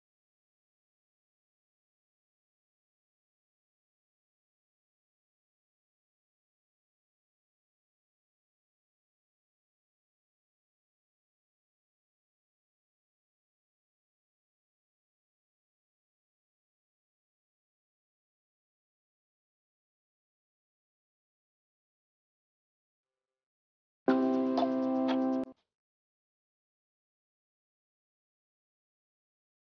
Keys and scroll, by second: 6.5 ctrl+space, 28.4 ctrl+z.